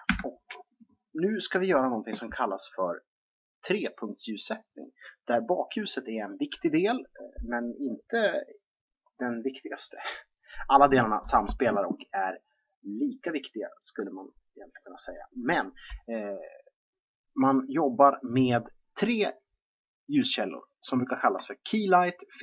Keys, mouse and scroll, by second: 0.0 Escape.